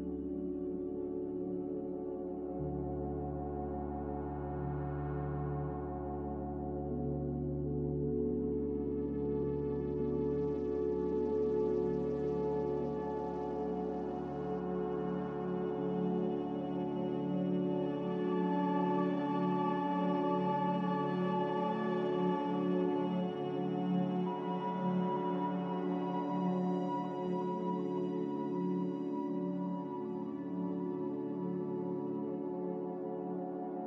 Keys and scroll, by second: 27.9 ctrl+z, 32.8 ctrl+z.